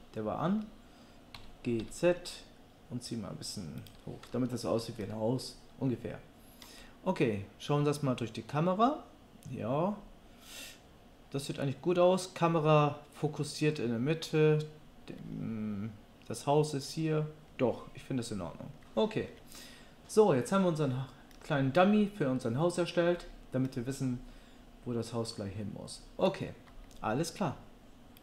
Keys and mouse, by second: 1.4 g, 4.7 Tab, 27.5 middle click.